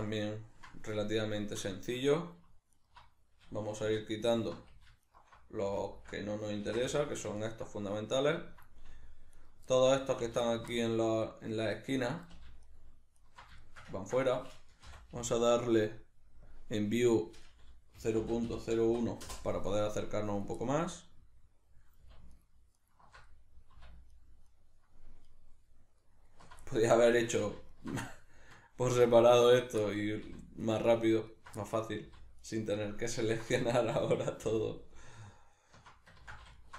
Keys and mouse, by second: 2.7 alt+right click, 3.9 2, 4.3 alt+right click, 5.1 alt+shift+right click, 5.9 alt+shift+right click, 6.7 ctrl+x, 6.9-9.4 shift+middle drag, 9.4 alt+right click, 9.7 alt+middle click, 10.5 alt+shift+right click, 10.7-12.7 middle drag, 12.7 alt+shift+right click, 13.2 alt+shift+right click, 13.6-16.5 shift+middle drag, 14.9 n, 16.5-20.7 drag, 19.3 Return, 20.7-22.3 middle drag, 22.3 alt+shift+right click, 22.8 alt+shift+right click, 23.2 middle click, 24.1 alt+shift+right click, 24.4 alt+shift+right click, 25.2 alt+shift+right click, 26.0 alt+shift+right click, 26.2 alt+shift+right click, 26.6-27.7 middle drag, 27.7 alt+shift+right click, 28.0-29.5 shift+middle drag, 29.5 alt+shift+right click, 29.8 middle click, 30.7 alt+shift+right click, 31.3 alt+shift+right click, 31.6 middle click, 32.4 alt+shift+right click, 33.1 alt+shift+right click, 33.5-34.6 shift+middle drag, 34.6 alt+shift+right click, 35.3 alt+shift+right click, 35.6 alt+shift+right click, 36.2 ctrl+z, 36.6 alt+shift+right click.